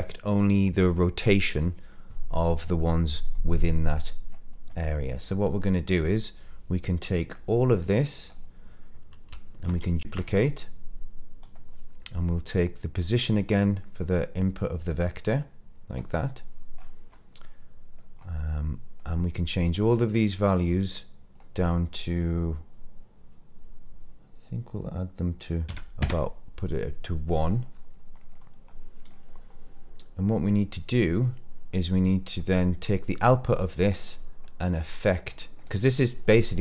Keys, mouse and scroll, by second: 3.6 middle click, 4.6 click, 7.2-8.2 drag, 9.6 shift+d, 11.4 click, 12.0 middle click, 13.3 click, 13.6-16.0 drag, 16.8-18.0 scroll up 3, 17.4 middle click, 18.2-18.7 scroll up 1, 18.7 middle click, 19.7-26.1 drag, 27.7-28.2 scroll down 3, 28.2 middle click, 28.7 middle click, 29.3-30.0 scroll down 2, 30.0-31.3 middle drag, 31.8 click, 32.7 click, 33.5 click, 34.4 click, 35.0 click, 35.6 click.